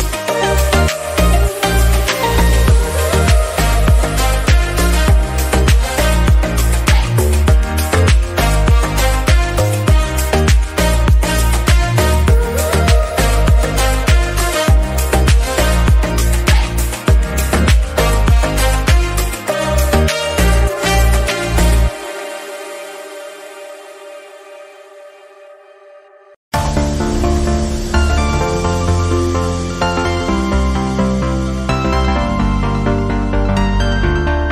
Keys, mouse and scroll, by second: 1.2 alt+s, 3.6 Tab, 3.8 drag, 3.9 scroll down 2, 4.1-4.5 shift+middle drag, 4.5 click, 4.9 g, 7.2 r, 8.3 alt+z, 8.4 click, 8.8 click, 9.4 g, 10.2 click, 10.3-10.7 scroll down 5, 10.7 scroll up 4, 10.8-11.3 shift+middle drag, 11.3 click, 11.9 alt+z, 12.6 shift+d, 13.9 r, 15.4 g, 16.4-17.1 scroll up 2, 16.7 shift+middle click, 17.4 s, 19.6 click, 20.7-21.0 shift+middle drag, 21.0 click, 21.7 alt+z, 21.9 click, 22.0-22.5 scroll down 7, 22.5-23.3 shift+middle drag, 23.3-23.9 scroll up 5, 23.5 shift+middle click, 23.9 shift+middle drag, 24.2 click, 24.6 alt+z, 25.2 s, 26.4 click, 26.8 drag, 27.1 shift+middle drag, 27.4 click, 27.6-27.9 shift+middle drag, 27.9 click, 28.4 s, 29.3 drag, 29.7 alt+z, 30.3-30.7 shift+middle drag, 30.7 scroll down 3, 30.9-32.3 middle drag, 32.3 click, 33.6 click, 33.9-34.4 middle drag, 34.4 click.